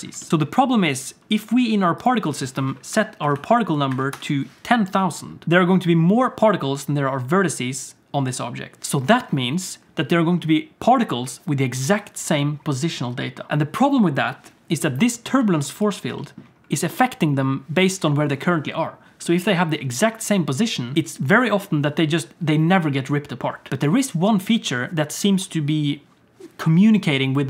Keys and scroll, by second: 0.3 alt+a, 0.3 ctrl+s, 4.1 0.